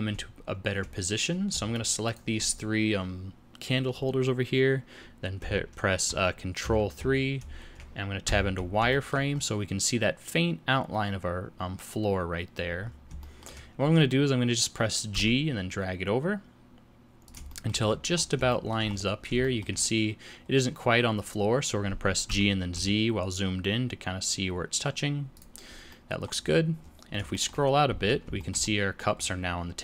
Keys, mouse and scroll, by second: 1.7 shift+click, 2.1 shift+click, 6.6 ctrl+KP_3, 8.2 z, 8.9 shift+middle click, 9.3 scroll up 5, 12.8-13.1 scroll down 4, 13.2 shift+middle click, 15.1 g, 17.5 shift+middle click, 17.9-18.2 shift+scroll up 10, 18.5 shift+middle click, 18.8-19.2 shift+scroll up 3, 19.7 shift+middle click, 19.8 scroll up 2, 22.3 g, 25.9 middle click, 26.4-27.2 scroll down 13, 27.3 shift+middle click, 27.6 scroll down 2, 27.9 z, 28.4 shift+middle click, 28.6 middle click, 29.2-29.8 scroll down 2.